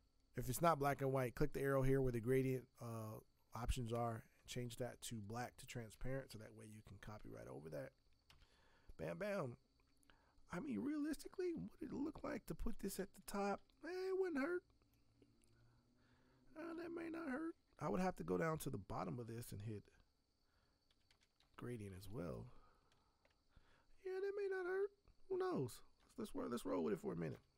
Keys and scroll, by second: 8.3 v, 20.7-21.9 typing, 26.0 b, 27.3 v.